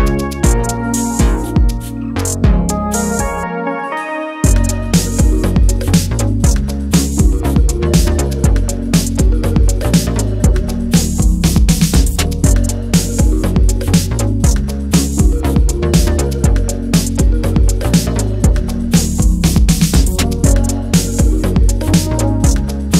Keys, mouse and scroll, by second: 0.0-2.9 typing, 3.8-11.4 drag, 12.0-12.9 typing, 13.2 Return, 14.9-17.9 drag, 19.3 BackSpace, 21.9-22.9 typing.